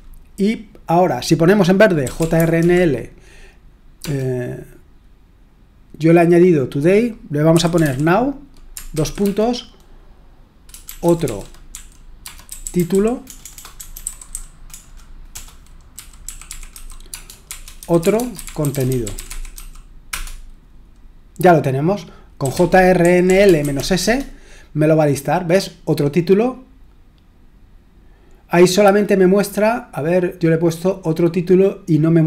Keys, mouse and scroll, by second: 1.8-4.0 typing, 7.3-9.2 typing, 10.7-20.0 typing, 20.1 Return, 22.2-24.2 typing.